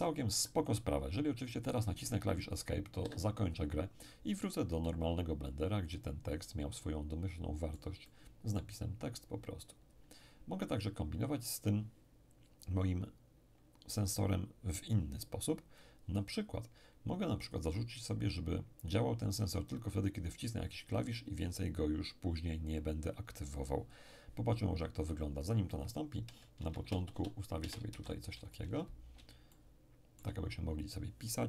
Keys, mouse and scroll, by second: 3.0 Escape, 4.8-9.2 middle drag, 9.2-10.4 scroll up 1, 10.4-11.6 scroll down 1, 15.8-18.5 drag, 25.7 Tab, 26.6 BackSpace, 26.8 BackSpace, 27.1 BackSpace, 27.9 shift+., 28.6 Tab, 29.5 shift+click, 30.0 shift+middle click, 30.1-31.2 shift+drag.